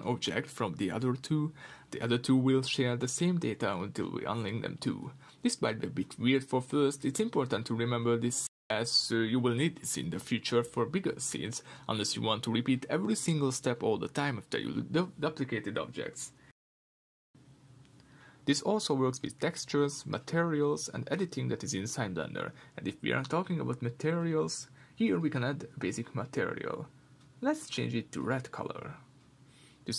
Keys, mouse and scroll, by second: 0.1-0.8 drag, 0.8 Tab, 1.9 r, 3.6 Tab, 4.3 click, 4.6 Tab, 5.5 r, 7.6 Escape, 8.1 Tab, 9.6-11.7 drag, 11.7 Tab, 12.9 g, 13.5 click, 13.8 Tab, 14.6-26.1 middle drag, 26.1 click.